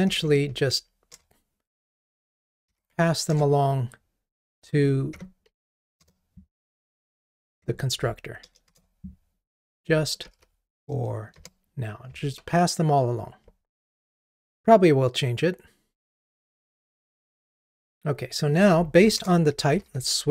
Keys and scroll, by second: 1.2 Return, 13.9 ctrl+r.